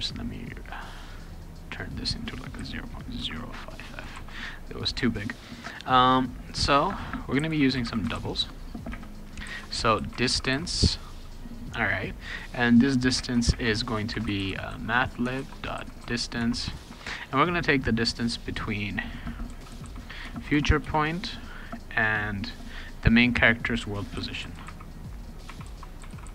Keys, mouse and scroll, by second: 1.7 click, 3.2 0, 4.1 ctrl+s, 4.4 click, 7.1-11.0 typing, 13.2-16.8 typing, 19.2-20.8 typing, 23.9-26.3 typing.